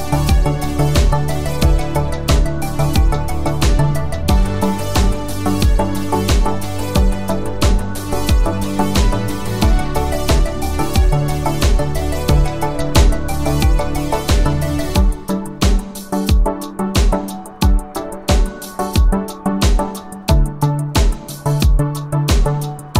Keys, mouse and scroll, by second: 0.4 click, 4.4 click, 6.4-8.7 typing, 10.2 click, 14.1 click, 16.6 click, 19.4 click, 21.6 click.